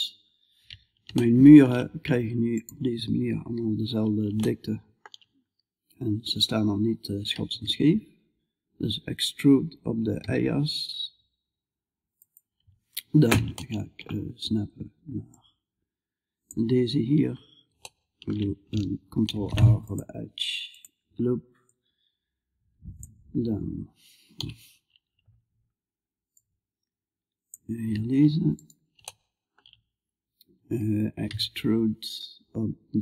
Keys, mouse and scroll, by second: 0.6-6.7 middle drag, 6.7 e, 12.9 middle click, 14.8-16.7 drag, 16.8 middle click, 18.7 ctrl+r, 21.1-22.9 drag, 22.9-25.7 middle drag, 23.8 KP_Decimal, 25.7-26.9 drag, 28.8-30.7 middle drag, 30.7 e.